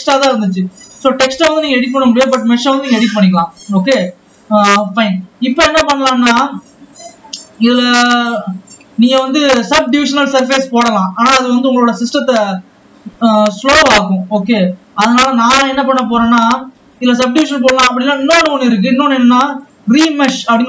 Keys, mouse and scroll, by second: 1.1 scroll down 2, 1.2 click, 4.1-5.9 scroll down 2, 5.9 ctrl+s, 7.2 scroll up 6, 7.4-7.9 scroll down 2, 7.9-9.3 drag, 9.3 Tab, 17.2 Tab, 18.0 Tab, 20.1 click.